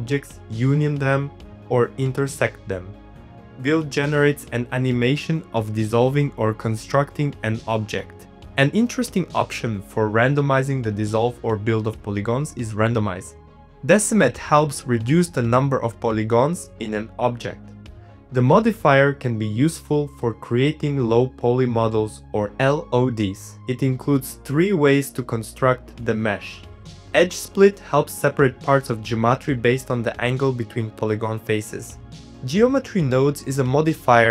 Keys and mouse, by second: 0.4 middle click, 1.8 click, 2.0-3.0 middle drag, 3.9-8.6 drag, 9.6 click, 10.2-13.5 drag, 14.0 shift+middle click, 14.4 middle click, 15.1-19.4 shift+drag, 19.8 click, 21.4 click, 21.8 click, 22.1 click, 22.7 click, 23.0 click, 23.6 click, 23.9-25.4 drag, 25.9 middle click, 26.6 middle click, 27.0 middle click, 27.7 click, 28.4 middle click, 28.6 Tab, 28.8 Tab, 29.0 3, 29.1 middle click, 29.5 g, 30.2 g, 30.6 click, 30.8 g, 31.3 middle click, 32.6 click, 33.1 middle click, 33.5 click.